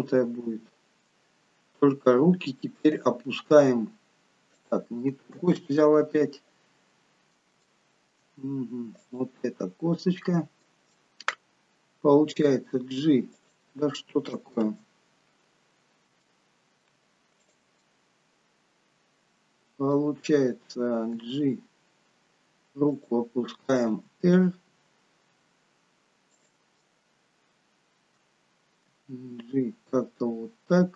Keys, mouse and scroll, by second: 2.1 scroll down 1, 3.0 click, 3.6 g, 5.9 ctrl+z, 6.8-7.4 scroll up 2, 7.7 shift+middle click, 8.6-9.0 scroll up 1, 9.0 click, 9.7-10.2 scroll down 3, 10.0 middle click, 11.0 shift+middle click, 12.6 g, 14.9 ctrl+z, 15.8 scroll up 3, 16.3 shift+middle click, 17.5 click, 17.8 middle click, 20.2 scroll down 3, 21.2 g, 24.1 r, 26.8 middle click, 28.9 g.